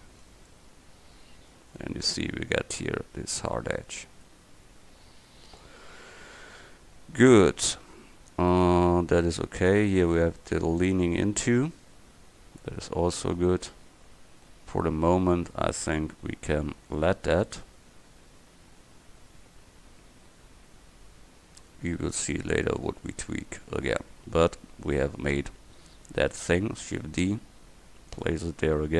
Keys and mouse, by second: 0.3 Tab, 5.9 middle click, 8.8-12.7 middle drag, 17.2 Tab, 18.2 click, 18.9 click, 23.1 Tab, 26.9 shift+d, 28.9 KP_1.